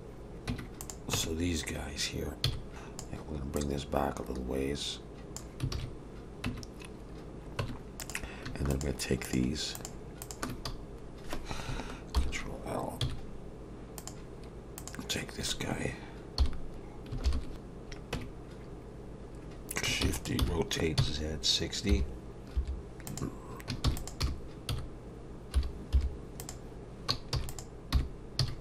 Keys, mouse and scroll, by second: 0.5 Tab, 0.8 click, 1.1 Tab, 2.4 z, 2.7 alt+a, 2.7 b, 3.6 click, 5.7 alt+a, 6.5 Tab, 7.6 Tab, 8.0 click, 8.7 shift+click, 9.2 click, 10.2 click, 12.2 ctrl+l, 13.0 x, 14.8 click, 16.4 l, 17.2 ctrl+l, 18.1 Tab, 20.0 shift+d, 20.4 r, 23.8 shift+d, 24.2 r, 27.3 shift+d, 27.9 r.